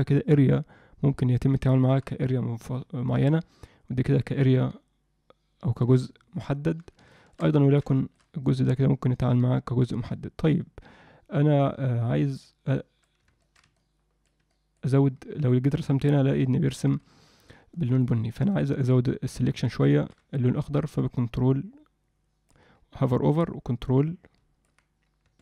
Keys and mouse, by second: 7.1 shift+middle click, 7.6 ctrl+middle click, 7.9 alt+shift+middle click, 8.5-13.1 drag, 13.4 ctrl+middle click, 13.7 alt+middle click, 14.5 middle click, 15.7 click, 16.9 ctrl+z, 17.7 alt+middle click, 18.5 alt+middle click, 19.8 ctrl+alt+middle click, 21.1-22.5 ctrl+drag, 23.5-24.7 ctrl+drag, 25.3 ctrl+click.